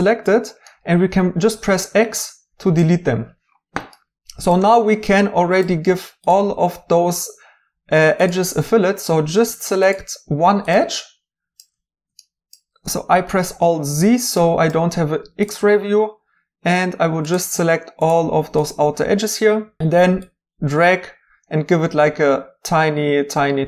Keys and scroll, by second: 0.1 x.